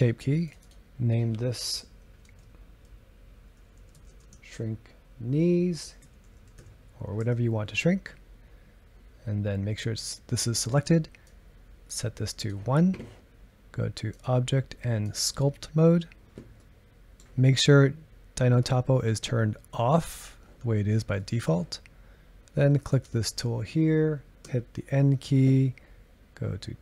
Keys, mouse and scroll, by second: 6.4 e, 11.3-16.6 drag, 16.6-19.8 middle drag, 21.2-22.9 middle drag, 22.9-24.4 drag, 24.4 n.